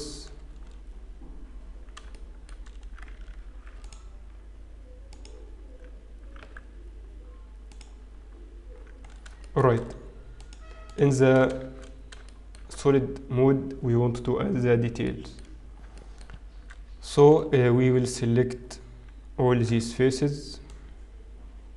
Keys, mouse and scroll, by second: 1.1 Tab, 1.1-1.9 scroll down 1, 2.1 shift+middle click, 2.7-3.0 scroll up 1, 3.7 ctrl+r, 7.4 g, 8.7-9.7 scroll down 7, 9.7 shift+middle click, 10.4 click, 10.9 click, 11.7 shift+z, 12.2 shift+middle click, 14.0-14.3 scroll down 3, 15.0 shift+middle click, 16.2 shift+middle click, 18.0-19.1 scroll down 4, 19.1-20.3 scroll down 2, 20.3 b.